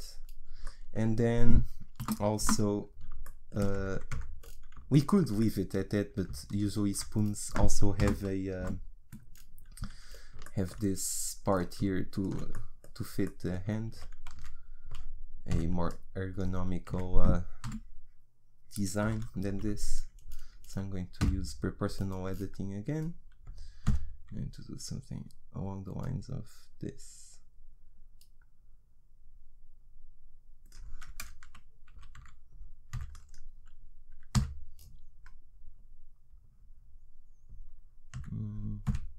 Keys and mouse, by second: 2.0 KP_1, 2.4 KP_3, 4.1 Tab, 7.3 click, 8.0 KP_1, 8.6 KP_3, 11.5 click, 12.1 click, 14.0 a, 14.4 z, 15.5 b, 16.9 z, 17.6 KP_1, 19.0 KP_3, 21.3 g, 32.0 a, 32.2 z, 33.0 b, 34.3 g.